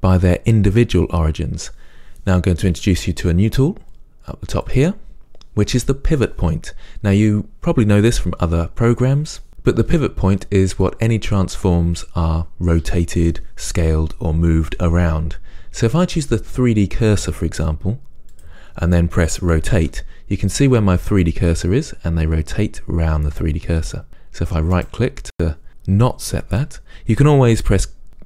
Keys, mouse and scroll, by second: 20.0-25.1 drag, 20.0 r, 25.1-28.2 right drag.